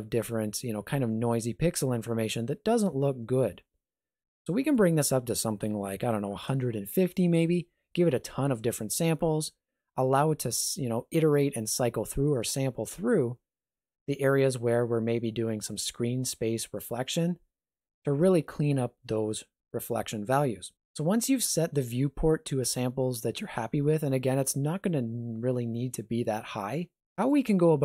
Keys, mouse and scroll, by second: 4.8 click.